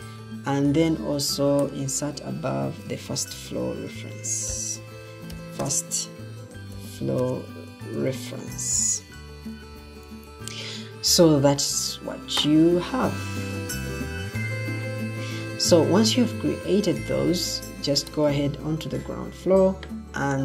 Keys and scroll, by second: 0.0-0.4 typing, 3.0 shift+f, 4.4-10.6 typing.